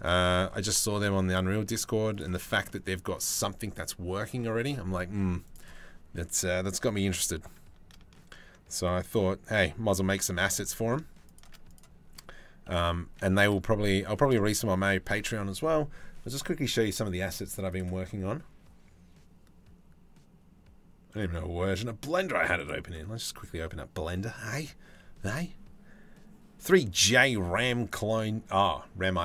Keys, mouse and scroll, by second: 0.1 g, 5.1 click, 6.5 g, 11.3 click, 12.3 g, 15.1 ctrl+s.